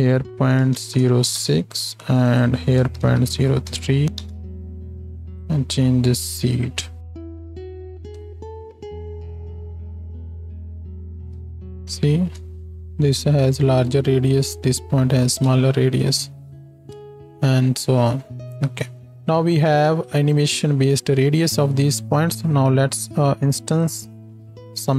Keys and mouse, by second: 7.5 shift+Left, 7.9 space, 11.3 space, 19.0 middle click, 23.4-24.9 middle drag.